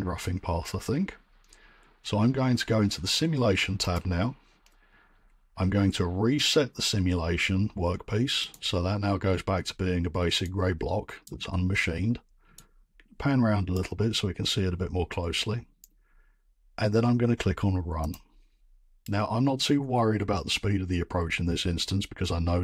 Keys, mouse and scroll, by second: 3.9 click, 8.5 click, 11.2 right click, 11.5 scroll, 12.2-12.6 scroll, 13.7 right click, 17.3 right click, 17.7 right click, 18.1 click.